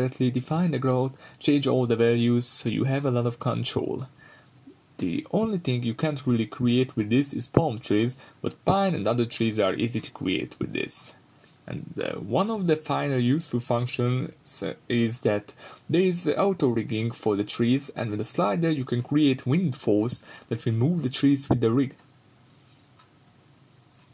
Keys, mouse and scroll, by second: 1.8-10.9 drag, 2.0 scroll up 2, 11.4-15.6 drag, 16.1 scroll down 2, 16.4-18.5 middle drag, 18.5-24.0 drag.